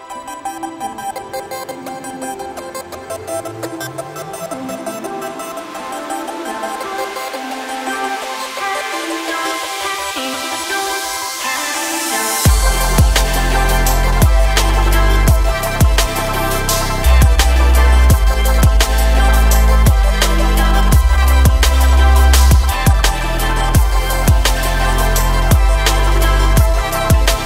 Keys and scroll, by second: 6.2 g.